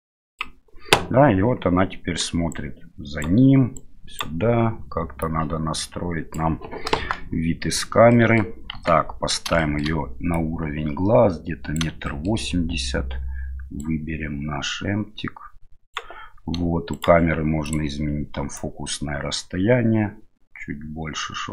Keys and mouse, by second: 2.5-5.0 right drag, 5.2-6.3 drag, 6.9 KP_0, 8.1 middle click, 8.7 KP_1, 9.6 shift+middle click, 10.4-11.8 drag, 12.1 shift+middle click, 13.8-16.0 right drag, 16.9 right click, 17.7 click, 18.6-21.5 drag.